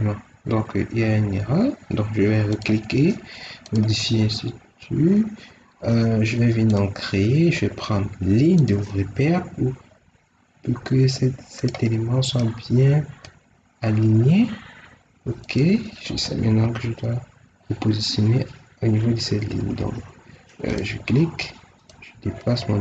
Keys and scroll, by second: 16.3 Escape, 19.4 Escape.